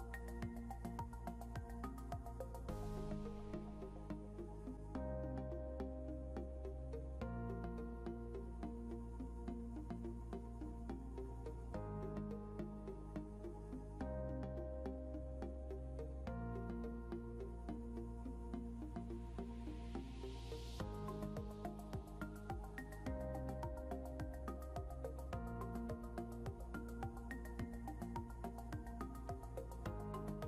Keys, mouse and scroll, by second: 0.9 ctrl+z, 2.5 shift+click, 3.4 click, 4.1 ctrl+z, 5.2 click, 10.2 scroll up 1, 10.6 click, 15.3 scroll down 1, 16.3 click, 26.5 scroll down 1, 28.6 click.